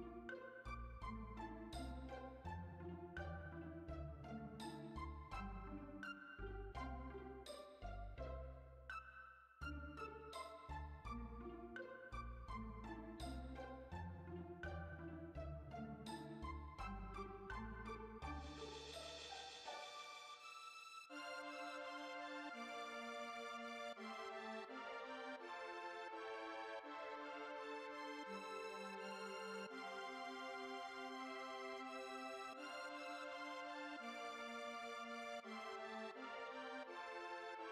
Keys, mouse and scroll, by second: 1.1 scroll down 2, 1.3 Tab, 1.5 middle click, 1.9-2.4 scroll down 5, 2.4 KP_3, 2.8 KP_7, 5.1-8.1 middle drag, 8.7-9.8 shift+middle drag, 9.8 click, 12.2 click, 12.4 middle click, 12.9 Tab, 13.2 middle click, 14.2 Tab, 14.9 click, 15.6 a, 17.5 Tab, 17.7 Tab, 18.9 click, 20.6 click, 21.1 KP_3, 21.9 r, 25.5-25.8 scroll down 2, 25.8 g, 27.2-27.5 shift+middle drag, 27.5-27.9 scroll up 1, 27.9 shift+middle click, 28.3 g, 29.7 ctrl+a, 32.0-32.6 shift+middle drag, 32.6 click, 33.3 Tab, 33.7 Tab, 34.0 click, 34.2 Tab, 34.6 Tab, 35.0-36.0 shift+middle drag, 36.0-37.7 drag.